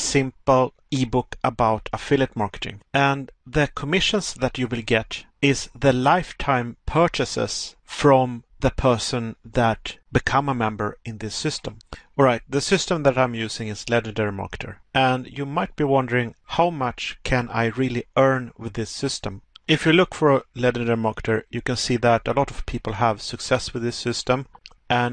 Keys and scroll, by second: 13.8 Pause, 16.3 Pause, 20.4 Pause, 24.8 Pause.